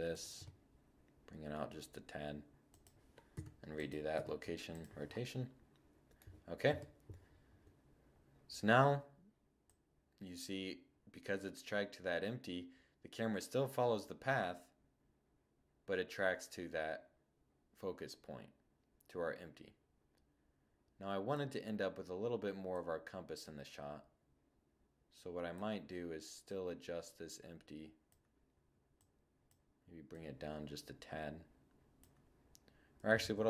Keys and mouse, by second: 2.3 i, 3.1 i, 4.5-4.8 middle drag, 5.6 0, 8.6-10.5 drag, 21.7-23.4 drag, 25.4-27.3 drag, 28.0-30.9 drag, 32.2 super+z, 33.1 z.